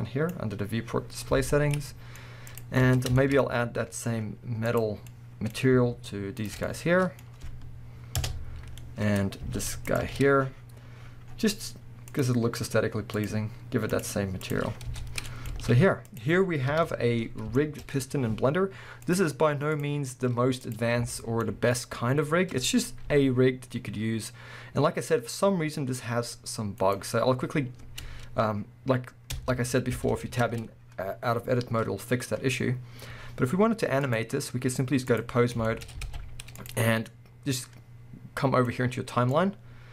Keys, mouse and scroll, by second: 1.4 alt+a, 1.7-2.5 middle drag, 2.5 click, 2.9 Tab, 3.2-4.7 shift+middle drag, 4.7 click, 5.0-5.6 scroll up 2, 5.1-6.4 middle drag, 6.4 shift+click, 6.7-9.9 middle drag, 8.2 ctrl+KP_Add, 8.7 scroll down 2, 9.2-9.9 scroll up 2, 9.9 alt+shift+click, 10.7-12.1 scroll up 1, 12.1-15.3 drag, 14.9 scroll down 1, 15.3-16.1 middle drag, 15.5 alt+a, 16.1 click, 16.7 KP_1, 17.6-19.1 shift+middle drag, 18.2-19.1 scroll up 2, 19.1-20.8 drag, 20.1 scroll up 2, 21.1-22.4 shift+middle drag, 21.9-22.4 scroll down 2, 22.4 scroll up 1, 23.1 g, 25.8-26.9 middle drag, 26.9-28.0 right drag, 28.0 Tab, 30.6 scroll down 2, 31.2 scroll up 1, 34.1-35.6 drag, 35.5 scroll down 1, 35.6-36.5 shift+middle drag, 35.8 scroll up 2, 36.0 alt+a, 36.5 click, 38.7-39.9 drag.